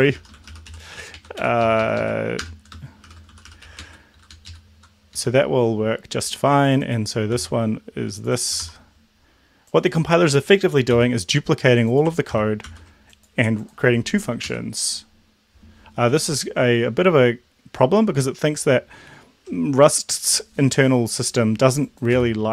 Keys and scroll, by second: 0.0-1.2 typing, 1.4 End, 1.6 Left, 1.7 Left, 2.0 Left, 2.5-4.2 typing, 4.3 Down, 4.5 Down, 4.5 Left, 5.1 Left, 7.4 ctrl+c, 8.7 ctrl+v, 11.0 ctrl+c, 12.4 ctrl+v, 12.7 ctrl+s, 14.5 Up, 22.3 space.